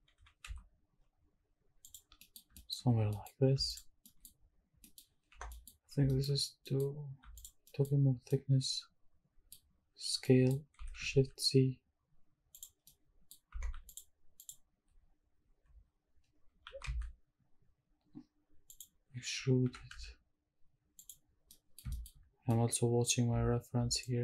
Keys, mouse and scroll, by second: 0.1 g, 0.4 z, 1.8 click, 2.0 scroll down 1, 2.2 middle click, 2.4-3.3 scroll up 4, 2.5 shift+middle click, 3.3 middle click, 3.7 alt+click, 4.0 middle click, 4.0 alt+scroll up 1, 4.5 scroll down 2, 4.8 middle click, 5.1 scroll up 1, 5.3 3, 5.5 middle click, 5.8 scroll up 1, 6.1 shift+middle click, 6.4 scroll up 1, 6.6 middle click, 7.3 alt+click, 7.6 alt+middle click, 8.0 scroll up 1, 8.2 scroll down 1, 8.3-9.5 middle drag, 10.1 scroll up 1, 10.2 middle click, 10.8 s, 11.1 shift+z, 12.5 click, 12.8 middle click, 13.5 2, 13.9 alt+click, 14.4 alt+click, 16.6 e, 16.8 s, 18.7 click, 19.6 e, 19.9 z, 21.0 click, 21.4 scroll down 1, 21.5 middle click, 21.9 shift+middle click, 22.2 scroll up 2, 22.5 middle click, 23.0-23.5 scroll down 1.